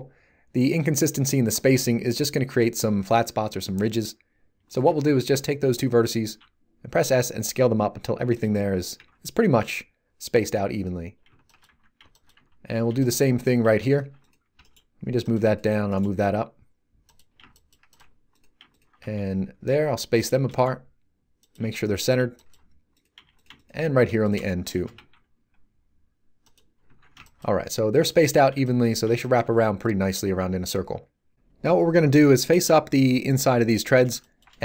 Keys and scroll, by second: 6.2 s, 8.9 a, 9.6 z, 14.5 g, 19.0 s, 20.4 g, 21.6 s, 24.9 s, 26.8 a.